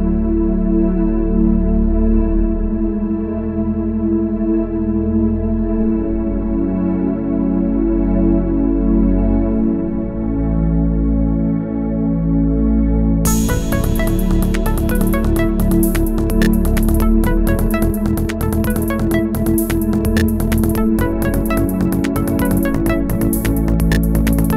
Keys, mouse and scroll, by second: 14.2-14.5 alt+scroll down 1, 14.5 space, 15.1 alt+scroll up 1, 16.1 alt+click, 22.2 shift+click.